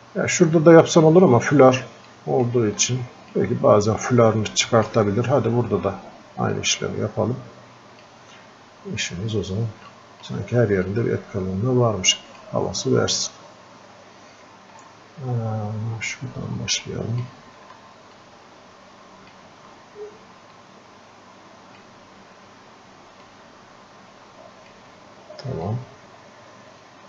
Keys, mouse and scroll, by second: 2.1 click, 2.9 alt+click, 4.1-5.4 drag, 5.4-5.7 scroll up 1, 5.7 scroll down 1, 6.6-8.6 drag, 8.6 scroll up 1, 9.9 alt+click, 10.9-13.4 drag, 13.4 scroll up 1, 13.6 scroll down 1, 16.8-18.2 drag, 18.2-20.6 alt+drag, 20.6-23.3 alt+drag, 23.3-25.7 alt+drag, 26.0-27.0 drag.